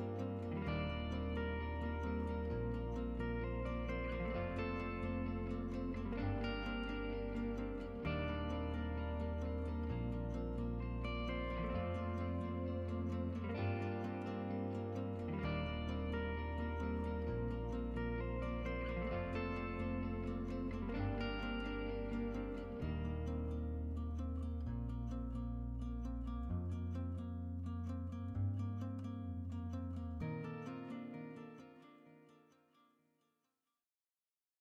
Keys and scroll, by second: 21.6-22.6 typing.